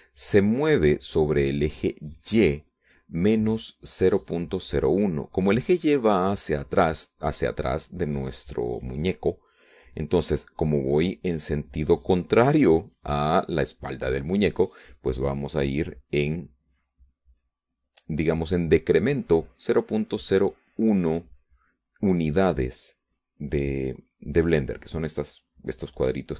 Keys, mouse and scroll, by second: 0.6 click, 4.1-5.0 drag.